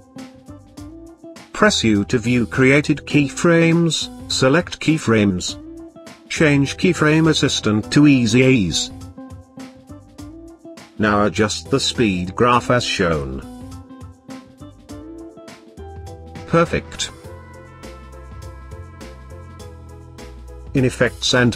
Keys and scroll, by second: 0.8 u.